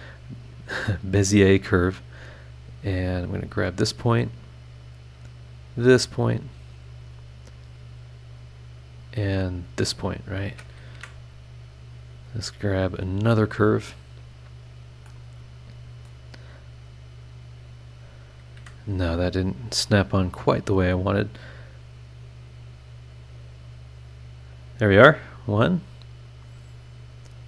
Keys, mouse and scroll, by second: 0.7-1.0 scroll down 2, 1.4-1.7 scroll up 2, 3.1 click, 5.6 click, 5.9 scroll down 2, 6.7 scroll up 2, 9.6 click, 10.9 Escape, 11.7 scroll up 2, 13.9 click, 14.5 scroll up 2, 15.1 middle click, 15.1 click, 16.0 scroll up 2, 17.9 click, 18.5 Escape, 20.5 click, 24.6 click, 27.2 click.